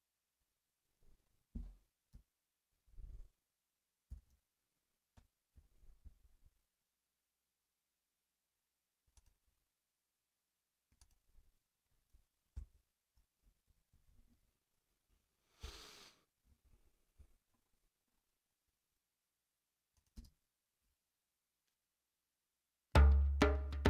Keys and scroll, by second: 4.0 super+=, 12.5 ctrl+alt+super+Up, 13.9 ctrl+alt+super+a, 15.5 Return, 20.1 space.